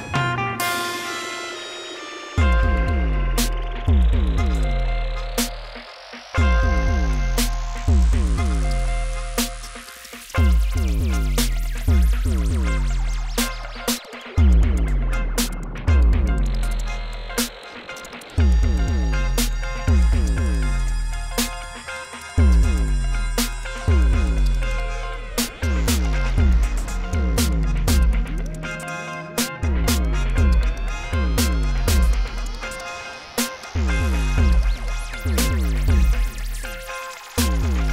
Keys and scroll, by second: 7.2 ctrl+2, 8.1 ctrl+2, 10.2 Tab, 10.7 alt+a, 11.4 c, 11.9 Return, 12.1 g, 12.3 z, 13.0 g, 14.4 Tab, 18.5 Tab, 18.7 a, 19.5 Tab, 20.5 Tab, 21.2 s, 21.2 x, 22.2 Tab, 24.0 alt+a, 24.5 Tab, 24.9 s, 25.0 z, 25.6 Tab, 27.1 shift+z, 28.6 ., 30.4 shift+d, 30.5 shift+z, 31.3 shift+z, 32.6 s, 33.4 g, 33.5 z, 35.1 ., 36.2 g, 36.4 shift+z.